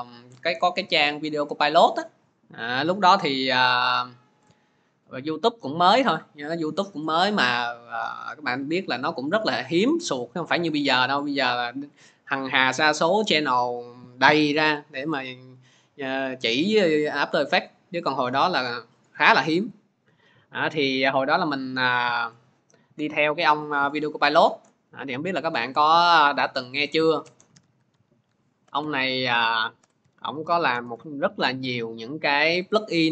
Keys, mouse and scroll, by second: 23.5 alt+Tab, 24.5 alt+Tab, 24.9 alt+Tab, 26.4 click, 27.3-30.9 typing, 28.7 click, 30.9 Return.